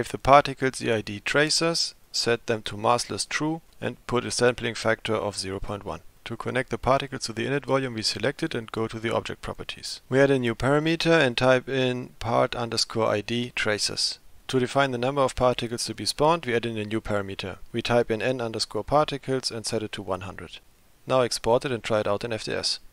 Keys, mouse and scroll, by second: 1.0 click, 2.1-3.2 drag, 3.9-6.2 drag, 9.5 click, 11.9 click, 12.5 click, 13.3 ctrl+v, 17.7-20.6 drag.